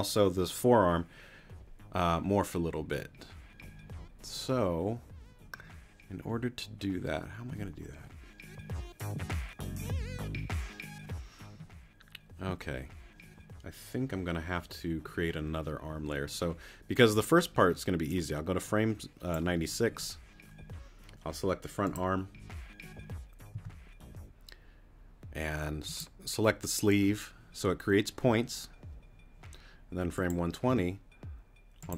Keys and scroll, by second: 23.5 t, 30.7 t.